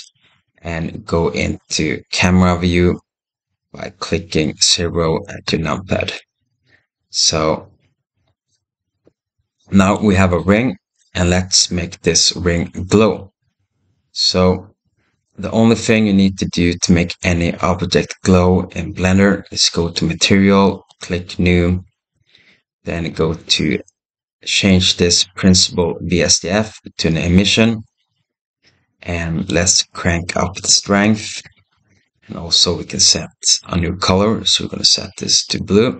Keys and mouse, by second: 5.3 KP_0, 9.8 shift+middle click, 13.0 click, 19.7 click, 21.5-27.5 drag, 29.4-31.9 drag, 30.7 BackSpace.